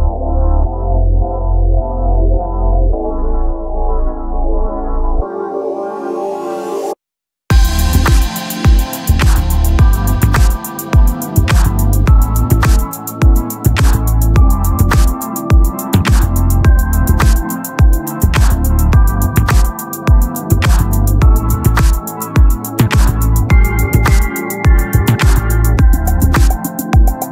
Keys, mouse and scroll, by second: 14.7 Tab, 14.8 Tab, 16.0-21.1 drag, 23.6-27.3 drag.